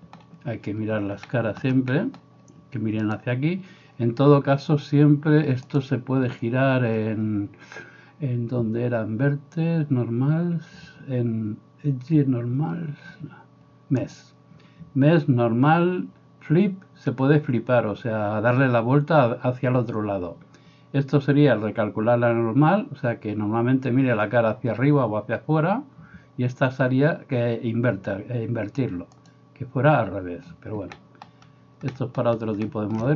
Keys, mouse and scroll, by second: 3.1 click, 3.3-5.8 middle drag, 5.8-33.1 drag.